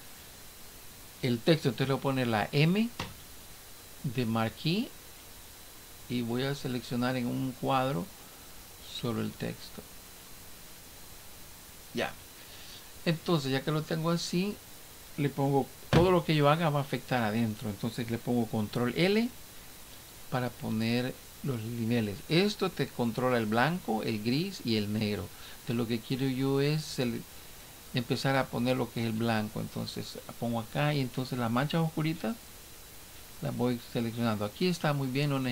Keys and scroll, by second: 19.0 ctrl+l.